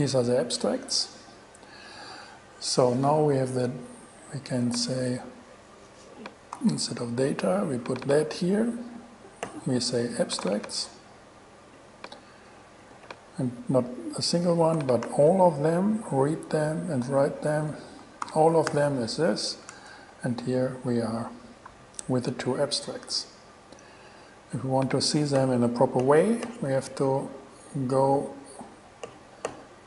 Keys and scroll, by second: 6.8 super+c, 8.1 super+v, 10.6 super+c, 13.1 super+v, 15.2 shift+7, 17.7 BackSpace, 18.2 shift+BackSpace, 18.4 shift+7, 18.9 alt+shift+g, 19.8 alt+g, 20.1 shift+Return, 25.2 BackSpace.